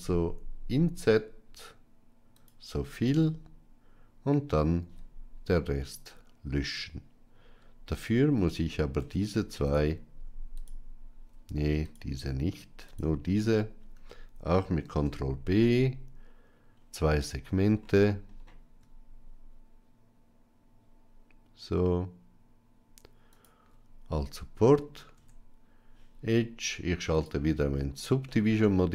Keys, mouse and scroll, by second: 4.7 x, 7.9 alt+click, 8.9 Tab, 9.5 alt+click, 10.4 alt+shift+click, 11.7 alt+click, 14.7 ctrl+b, 25.0 Tab, 27.0 click, 28.1-28.6 middle drag.